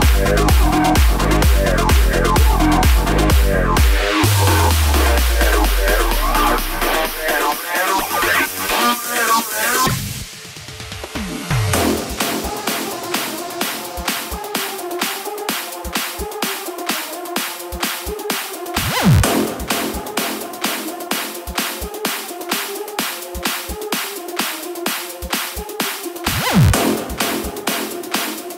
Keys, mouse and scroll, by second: 2.4 space, 3.3 space, 5.7-9.3 drag, 14.1 click, 16.5 i, 19.3-23.2 drag, 26.2 KP_7, 27.1 scroll down 2, 28.1 r.